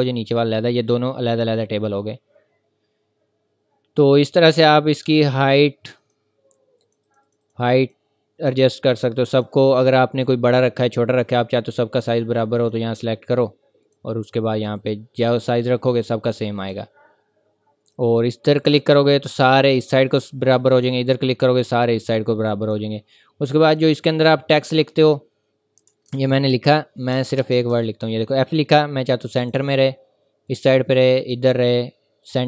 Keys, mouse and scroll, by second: 3.7 scroll down 1, 6.0 click, 25.9 typing, 27.1 BackSpace, 29.4 click.